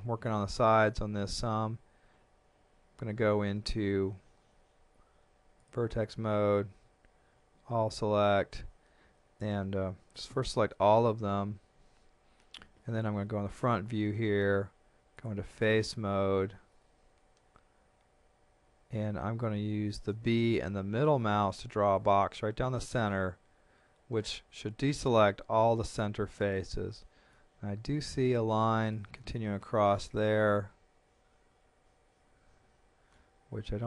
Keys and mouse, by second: 0.9 shift+middle click, 5.6 click, 6.8 a, 13.2 KP_1, 15.2 click, 20.1 b, 21.5 middle click, 27.3 middle click, 28.6 shift+middle click, 30.5 middle click.